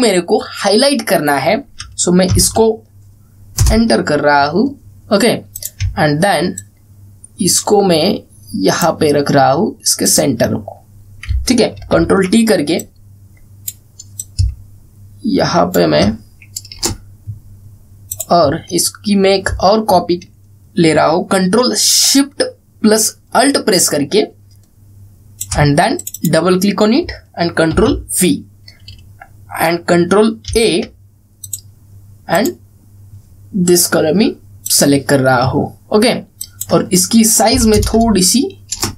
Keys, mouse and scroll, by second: 2.5 click, 3.0 ctrl+x, 4.2 Return, 6.2 click, 6.7 alt+scroll up 1, 7.2-9.8 drag, 12.5 ctrl+t, 13.5-14.4 drag, 19.5-26.1 alt+drag, 28.4 ctrl+v, 31.2 ctrl+a, 32.1 click, 35.3 click.